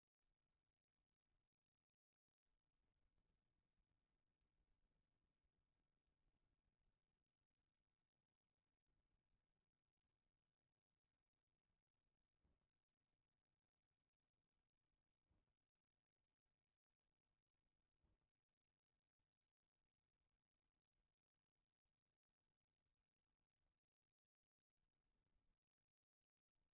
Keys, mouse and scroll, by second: 0.2 click, 3.5 shift+click, 4.8 click, 7.3-9.3 middle drag, 9.8 click, 10.3-14.3 middle drag, 14.9-24.1 middle drag, 24.6-25.8 middle drag, 26.3-26.7 middle drag.